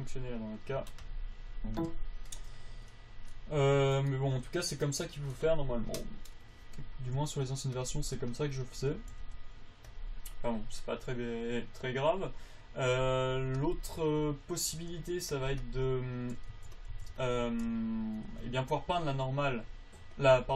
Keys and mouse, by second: 4.0 a, 4.3 right click, 4.6 g, 8.1 click, 9.6 g, 14.4 g, 15.1 g, 16.7 b, 17.3 a, 17.5 b, 19.6-20.5 drag.